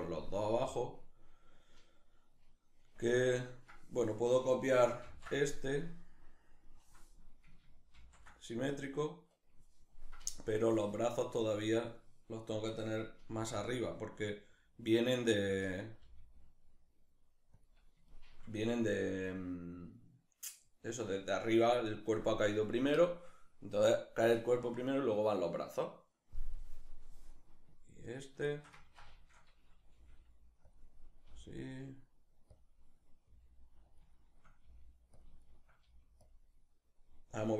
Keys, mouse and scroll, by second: 0.1-11.4 drag, 4.7 ctrl+c, 7.6 ctrl+shift+v, 11.4 right click, 12.9 g, 15.2 click, 15.7 g, 17.3 click, 17.7-27.7 shift+middle drag, 27.7 right click, 28.1-29.6 ctrl+shift+middle drag, 29.6 g, 30.3 click, 30.9 g, 32.2 click, 32.9 g, 33.6 click, 33.8-34.9 shift+middle drag, 34.3 g, 34.9 click, 35.1 shift+middle click, 35.5 g, 35.9 click.